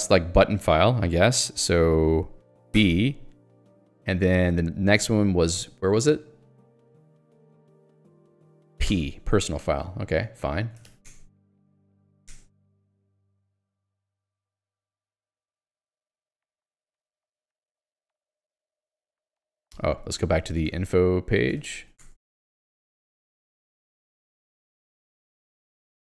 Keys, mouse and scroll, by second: 2.8 b, 11.1 Return, 11.8 ctrl+g, 12.2 ctrl+alt+j, 12.3 Return, 13.8 j, 17.5 l, 20.8 ctrl+alt+j, 21.6 ctrl+j, 22.0 Return.